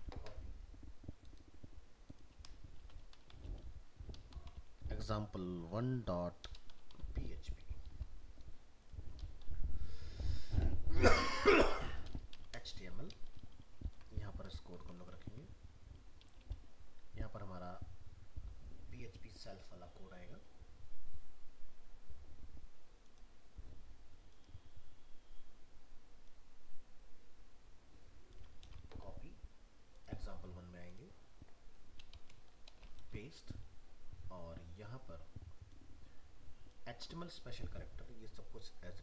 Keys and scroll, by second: 13.8 ctrl+v, 14.8 ctrl+s, 28.6 ctrl+c, 33.0 ctrl+v.